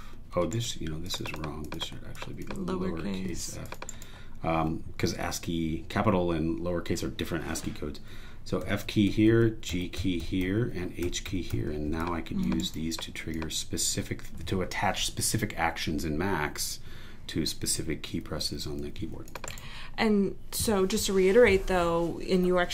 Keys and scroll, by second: 1.5 super+e, 3.3 f, 3.9 super+e, 8.6 f, 9.7 g, 11.0 h, 13.2 super+e, 19.5 super+e.